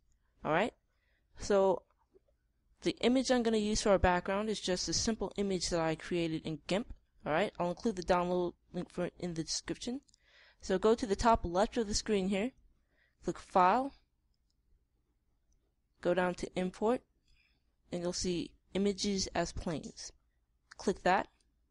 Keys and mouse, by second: 0.2 click.